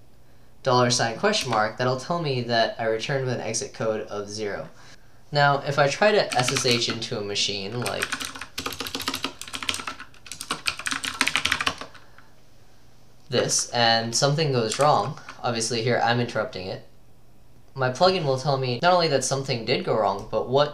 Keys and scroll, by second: 0.0-0.1 typing, 1.5 Return, 6.4-11.6 typing, 11.7 Return, 14.9 ctrl+c.